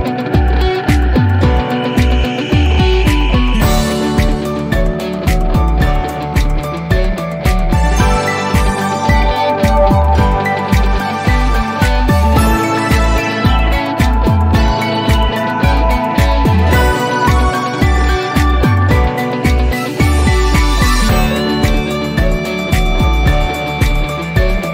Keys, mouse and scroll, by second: 18.8 drag.